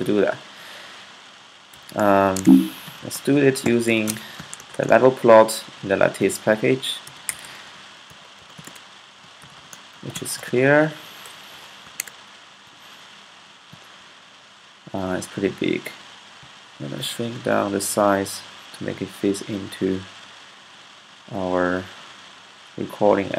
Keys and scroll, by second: 1.2-12.0 typing.